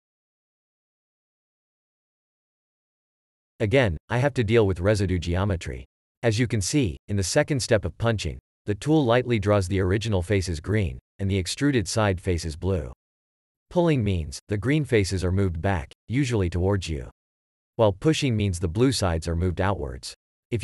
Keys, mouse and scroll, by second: 0.5 shift+e, 2.7 click, 4.5 x, 16.4 q, 17.0 q.